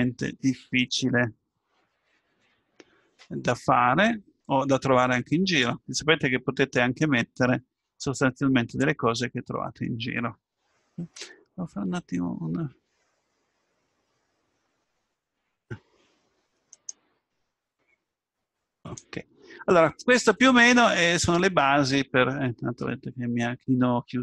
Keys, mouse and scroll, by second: 8.2 middle click, 11.8 F12, 16.7-17.7 right drag, 17.7 F12, 21.2-23.2 middle drag, 23.4 middle click.